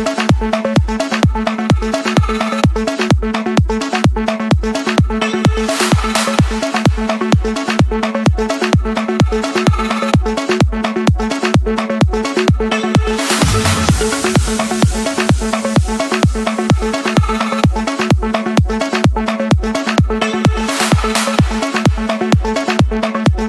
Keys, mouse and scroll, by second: 0.3 click, 2.3 F7.